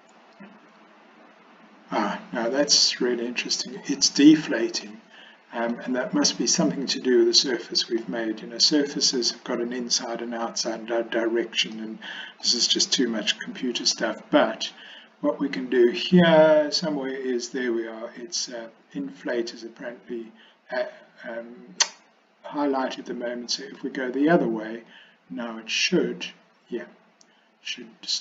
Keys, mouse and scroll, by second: 5.0 middle click, 8.1-9.3 middle drag, 11.9 middle click, 13.5 middle click, 23.6 click, 25.0-28.2 drag.